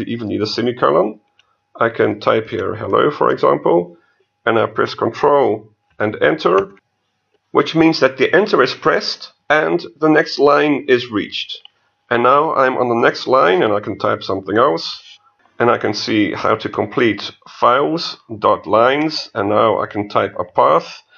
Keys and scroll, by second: 0.7 BackSpace, 1.5 Left, 6.7 ctrl+Return.